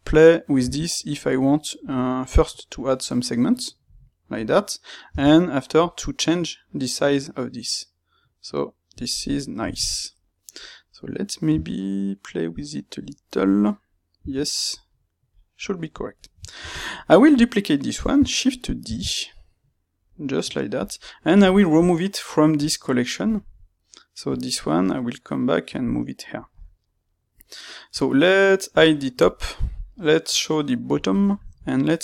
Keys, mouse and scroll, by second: 9.2-15.9 middle drag, 15.9 click, 16.1-18.8 ctrl+middle drag, 18.8 shift+d, 20.8 click, 22.5 click, 24.2 click, 25.7 click, 30.8-32.0 drag.